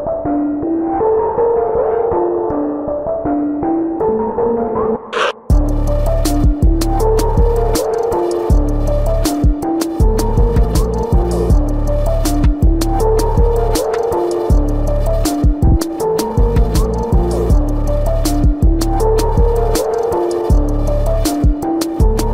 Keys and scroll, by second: 0.1 space, 0.9 space, 1.5 space, 1.9 space, 2.8 ctrl+=, 3.3 ctrl+=, 5.6 space, 7.1 space, 8.0 space, 8.5 space, 12.5 space, 13.1 space, 14.3 space, 14.9 ctrl+-, 15.0 ], 16.2 ], 17.0 ], 17.9 ctrl+alt+z, 18.3 ], 18.3 space, 20.0 space.